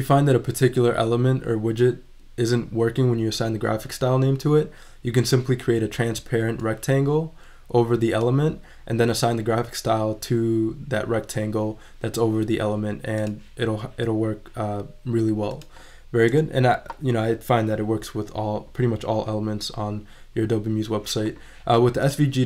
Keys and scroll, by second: 16.3 BackSpace.